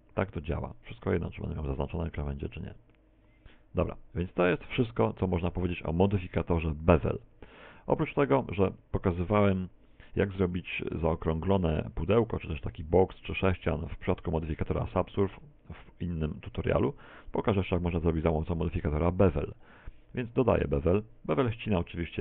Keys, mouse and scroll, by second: 0.5 click, 4.9 a, 6.4 click, 7.2 click, 13.1 shift+middle click, 15.8 Tab, 18.9 shift+a, 20.6-21.0 scroll down 2, 21.0 middle click.